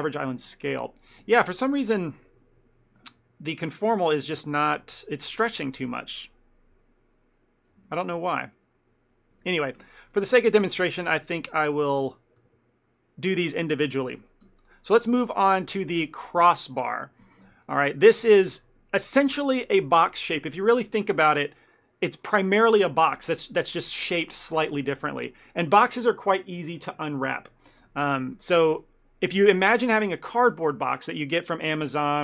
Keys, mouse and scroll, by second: 1.5 ctrl+middle click, 4.0 ctrl+shift+z, 7.8 ctrl+z, 8.0 ctrl+z, 9.1 ctrl+z, 9.5 ctrl+z, 9.9 ctrl+z, 11.6 ctrl+z, 12.5 ctrl+z, 13.7 Tab, 14.1 click, 14.6 Tab, 14.7 click, 15.3 shift+middle click, 15.6 ctrl+middle click, 18.3 ctrl+middle click, 18.5 shift+middle click, 19.0 ctrl+middle click, 21.5 ctrl+middle click, 28.4 ctrl+middle click, 28.8 middle click.